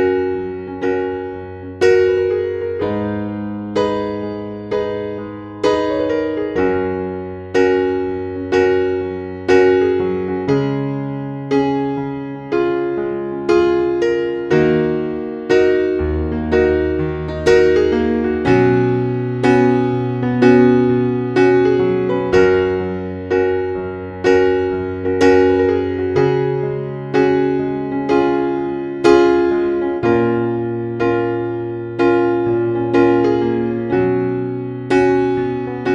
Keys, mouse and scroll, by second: 3.2-23.2 scroll down 1, 23.2 click, 27.3-27.8 scroll down 1, 30.0 click, 32.7 scroll down 1.